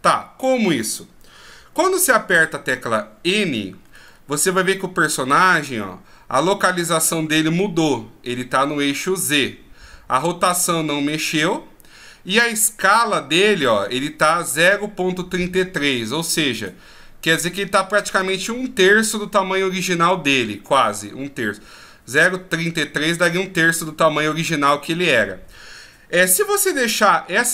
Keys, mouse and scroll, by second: 2.0 n, 3.4-4.1 scroll up 10, 5.2 scroll up 9.